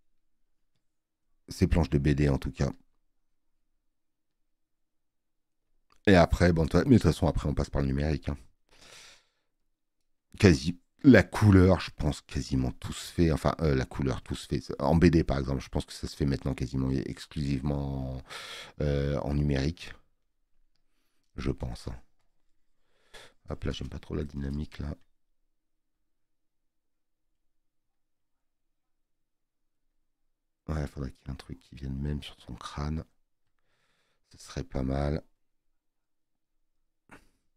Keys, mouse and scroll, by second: 0.7 space, 9.2 scroll up 1, 9.6 scroll down 1, 20.7 space, 20.8 click.